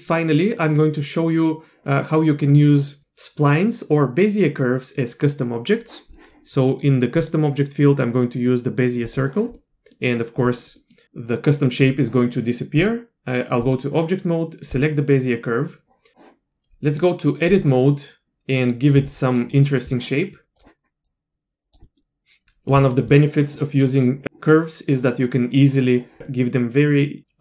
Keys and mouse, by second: 0.6 middle click, 7.2-9.1 drag, 9.6 middle click, 10.8 middle click, 12.9-13.7 drag, 14.7 click, 16.9-17.8 drag, 18.5 click, 19.2 shift+click, 21.0 click, 21.8 click, 22.9 shift+click, 26.2 click.